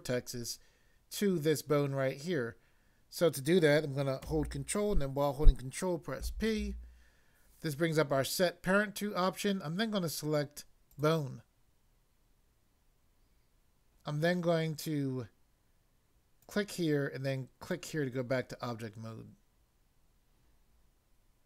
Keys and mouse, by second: 6.2 ctrl+p, 10.8 click, 16.4 click, 17.6 click.